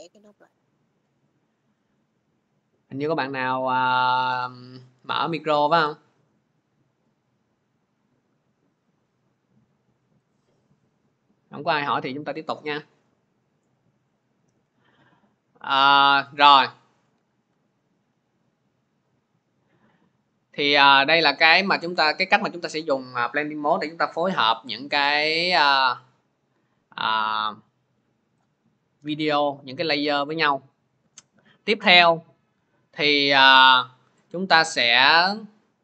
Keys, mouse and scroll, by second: 4.1-5.2 scroll, 5.4-5.9 scroll, 6.9-7.2 scroll, 8.4-9.1 scroll, 10.1 click, 14.2 click, 15.8 click, 19.3-25.7 drag, 28.2 click, 31.2 click, 33.1 click.